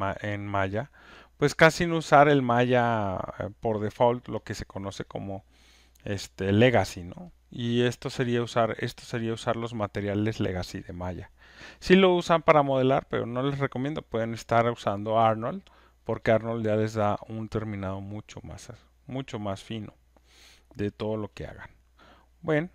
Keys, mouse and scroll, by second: 17.3-22.4 drag.